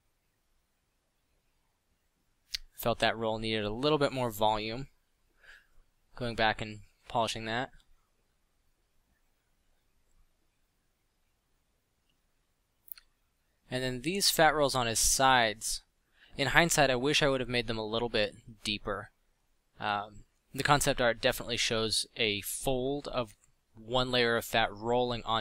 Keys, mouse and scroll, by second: 2.1 middle drag, 3.3-3.8 middle drag, 17.8-20.5 drag, 20.9 f, 23.4 f, 24.8 f.